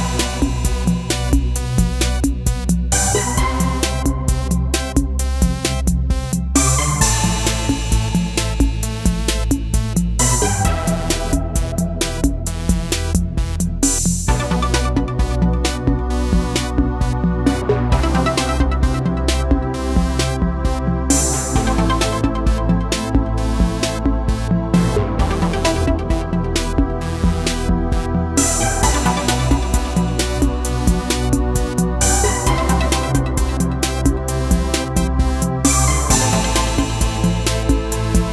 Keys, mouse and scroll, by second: 1.6 click, 9.1 click, 13.0-14.2 drag, 14.2 Up, 17.3 Up, 20.0 click, 22.9 ctrl+c, 24.8 ctrl+shift+v, 25.6-31.2 drag, 31.2-33.5 drag.